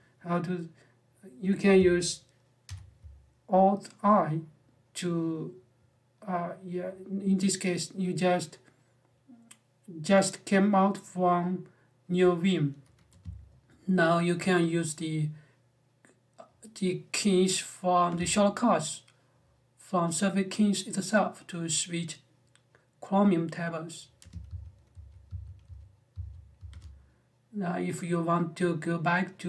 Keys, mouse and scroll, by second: 2.4 alt+i, 24.0-26.8 typing.